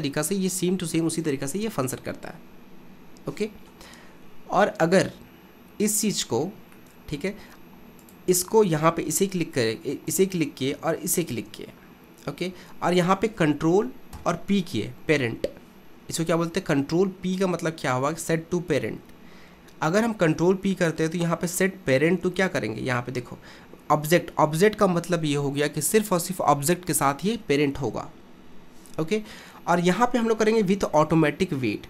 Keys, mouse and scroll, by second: 1.6 KP_1, 4.7-8.0 middle drag, 8.0 click, 10.1 click, 11.2 shift+click, 14.2 ctrl+p.